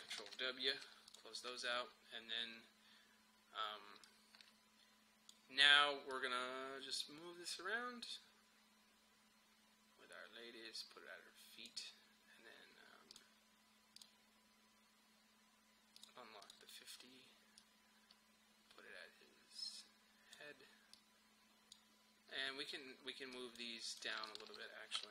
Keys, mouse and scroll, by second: 0.3 ctrl+w, 1.1 click, 3.7-4.1 typing, 4.1-23.4 drag.